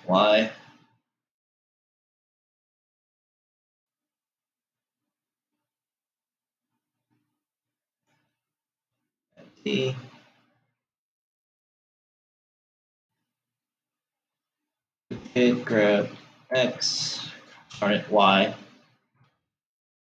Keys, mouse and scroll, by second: 9.4 g, 15.5 shift+d.